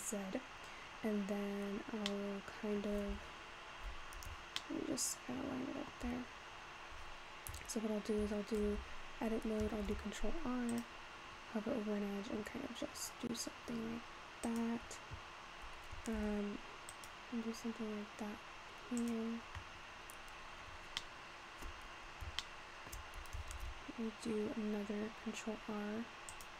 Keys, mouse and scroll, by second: 2.2-3.3 middle drag, 4.7-7.8 shift+middle drag, 8.7 Tab, 9.9 ctrl+r, 16.3 ctrl+r, 20.1-21.0 scroll up 4, 21.0 shift+middle click, 21.9-22.4 scroll up 3, 22.5-23.6 shift+middle drag, 23.6 ctrl+r.